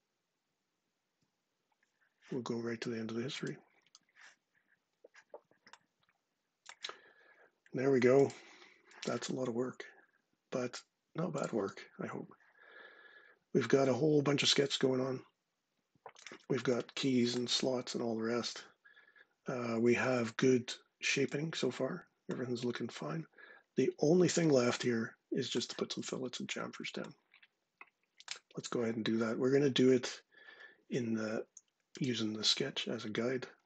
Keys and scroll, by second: 0.2 ctrl+6.